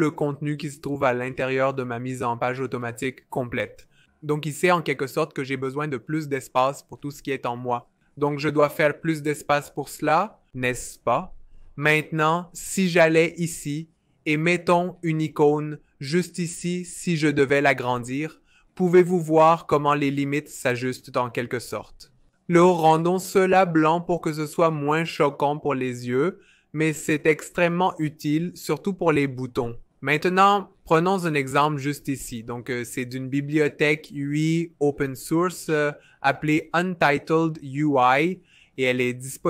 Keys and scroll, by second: 13.3 shift+i, 18.3 k, 24.6 typing.